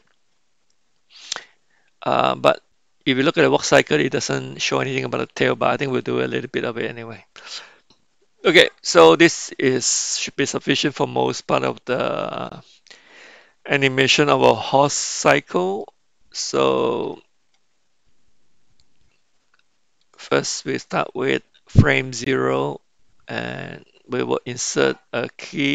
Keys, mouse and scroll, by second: 15.8-17.0 middle drag, 20.0 click, 21.9 Left.